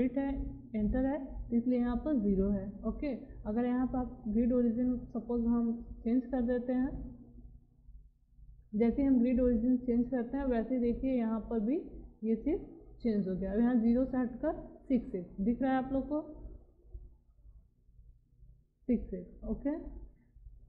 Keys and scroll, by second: 5.9 6, 7.9 6, 9.9 6, 12.0 BackSpace, 19.5 Escape.